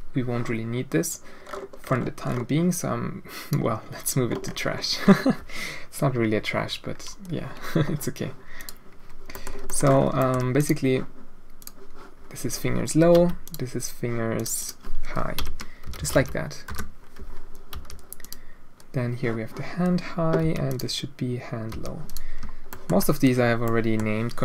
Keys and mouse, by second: 1.0-3.5 drag, 8.5 click, 9.3 drag, 9.7 shift+middle click, 10.2 shift+middle drag, 10.5 click, 11.6 click, 13.1 h, 13.4 click, 14.3-17.1 drag, 17.7 h, 18.2 click, 20.4 h, 20.6 click, 21.7 h, 22.0 click, 22.7 shift+middle drag, 23.6 click.